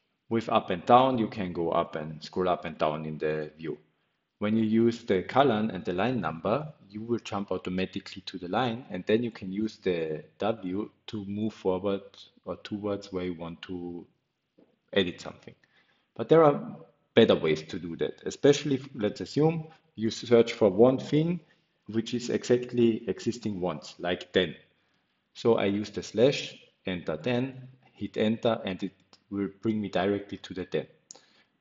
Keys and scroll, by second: 4.0-5.3 typing, 6.6-8.8 typing, 10.4 typing, 12.8 Escape, 13.0 Escape, 14.0-15.0 typing, 19.8-21.3 typing, 22.9 Return, 23.4-24.2 typing, 25.1 Escape, 25.2 Escape, 25.4 Escape, 25.5 Escape, 30.0-31.6 typing.